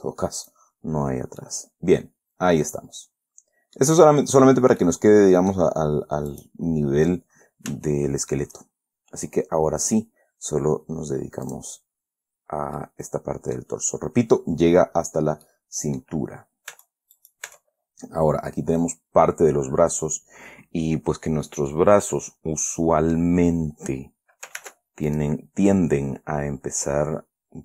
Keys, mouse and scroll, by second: 1.6-4.3 middle drag, 4.4 middle click, 5.2 middle click, 6.6 right click, 8.2 shift+middle click, 11.8 click, 12.5-13.1 scroll down 2, 13.1 middle click, 14.1-14.4 scroll up 2, 15.8 middle click, 17.1 Tab, 17.5 click, 17.7 right click, 17.8 Tab, 22.0-23.7 drag, 24.9 ctrl+r, 25.4 ctrl+click.